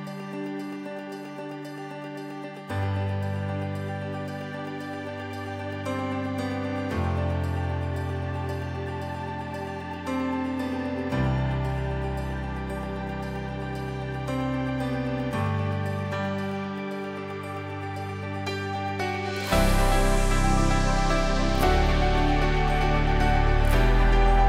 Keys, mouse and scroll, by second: 3.2-4.9 typing, 5.9-15.1 drag.